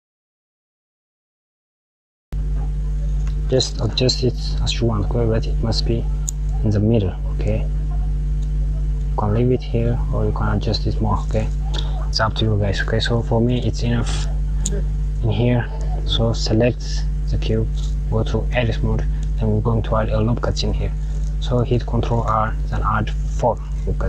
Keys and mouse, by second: 0.7 KP_Subtract, 1.5 click, 2.3 click, 2.6 g, 7.3 click, 8.5 click, 15.0 click, 16.7 click, 17.9 Tab, 21.6 ctrl+r.